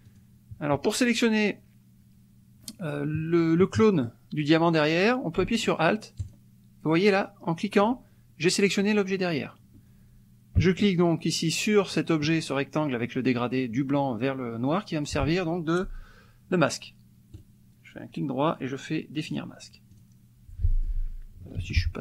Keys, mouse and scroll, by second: 0.1 click, 6.3-7.8 alt+drag, 11.8 shift+click, 17.3 right click, 19.4 click, 19.9 click, 20.8 middle click, 21.6 ctrl+z.